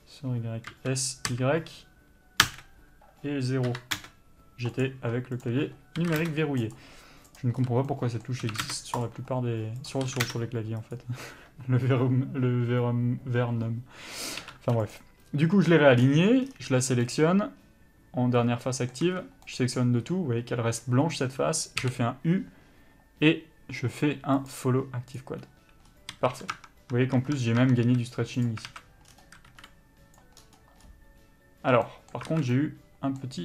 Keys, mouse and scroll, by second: 0.9 s, 5.0 click, 6.2 s, 6.9 click, 8.6 s, 9.2 click, 10.2 s, 14.6 3, 15.1 click, 17.2 middle click, 19.2 a, 19.6 middle click, 21.2 scroll up 1, 25.4 u, 26.3 a, 26.8 Tab, 27.8 Tab, 28.0 a, 28.6 click, 28.9 alt+a, 30.3 b, 32.1 middle click, 32.5 alt+a, 32.7 middle click.